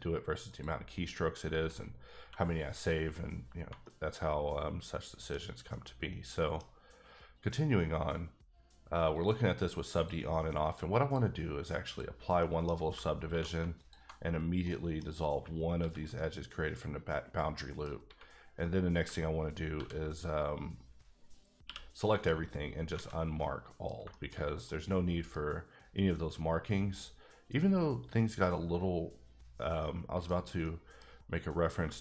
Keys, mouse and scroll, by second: 0.5 click, 2.2 q, 2.6 click, 3.3 scroll down 2, 3.8 middle click, 5.7 middle click, 6.9-8.0 scroll up 1, 9.1 click, 9.9 click, 10.6 click, 11.0 click, 11.8 click, 12.4 middle click, 12.7 scroll up 2, 13.3 2, 13.8 alt+click, 14.2 scroll down 3, 14.6 middle click, 15.1-15.8 scroll up 2, 15.8 ctrl+x, 16.1 middle click, 18.0 a, 19.7 ctrl+e, 21.6 q, 22.1 click, 22.9 alt+a, 23.1 scroll down 1, 23.4 middle click, 23.9 scroll down 1, 24.1 shift+middle click, 24.6 scroll up 1, 24.6 middle click, 25.4-28.0 scroll up 2, 29.5 scroll down 1, 29.8 middle click, 30.6 middle click, 31.1 scroll up 1, 31.8 shift+scroll up 1, 31.9 shift+middle click.